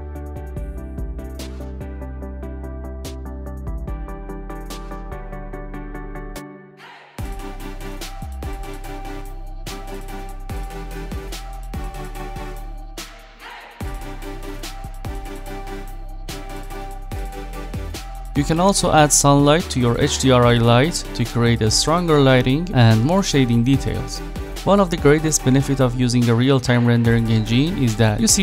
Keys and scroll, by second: 2.2-3.1 typing, 16.4 ctrl+z.